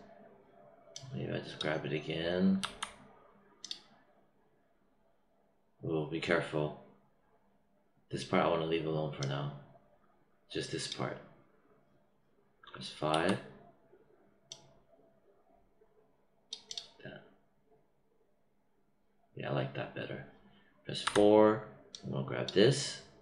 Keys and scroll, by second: 13.1 5, 21.0 4.